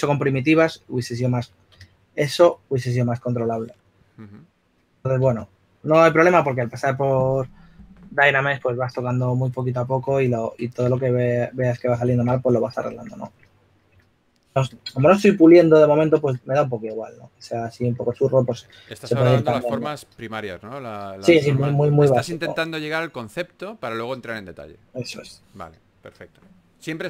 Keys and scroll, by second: 1.6-2.5 typing, 5.8-6.6 typing, 11.3-12.8 typing, 13.9-15.6 typing.